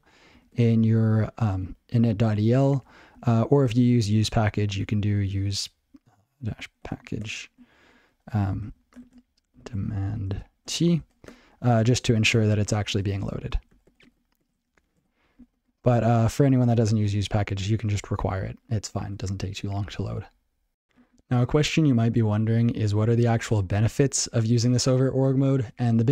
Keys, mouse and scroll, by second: 0.5 ctrl+e, 3.3 ctrl+n, 3.5 ctrl+p, 4.2 ctrl+a, 4.5 ctrl+f, 4.6 ctrl+a, 4.8 ctrl+alt+k, 4.9-7.4 typing, 7.8 ctrl+e, 8.3 ctrl+b, 8.4 ctrl+e, 8.6 alt+j, 9.0-11.1 typing, 9.5 alt+j, 11.3 Tab, 12.0 ctrl+p, 12.3 ctrl+n, 12.5 ctrl+p, 12.7 ctrl+a, 12.9 ctrl+space, 13.0 ctrl+n, 13.2 ctrl+n, 13.5 ctrl+g, 13.7 ctrl+/, 13.8 ctrl+/, 14.0 ctrl+/, 14.1 ctrl+/, 14.4 ctrl+/, 14.6 ctrl+/, 15.0 ctrl+/, 15.4 ctrl+s, 16.2 ctrl+e, 22.4 ctrl+p, 22.6 ctrl+p, 22.9 ctrl+a, 23.0 ctrl+p, 23.2 ctrl+p, 23.6 ctrl+n, 24.0 ctrl+n, 24.5 ctrl+n, 24.7 ctrl+n, 25.0 ctrl+p, 25.2 ctrl+p, 25.5 ctrl+n, 25.7 ctrl+n, 25.8 ctrl+n, 26.0 ctrl+n.